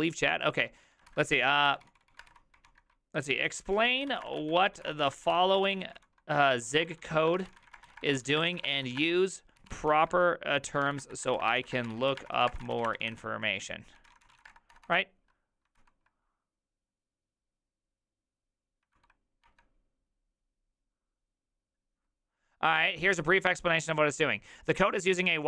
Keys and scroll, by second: 0.4-16.3 typing, 18.9 ctrl+v, 19.4 Return.